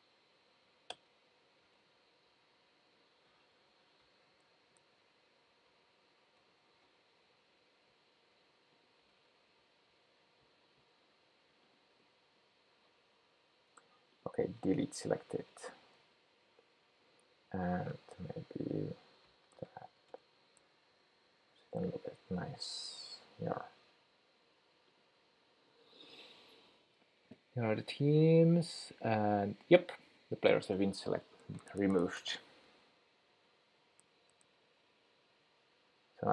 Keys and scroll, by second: 1.0 Return, 18.6 shift+super+9.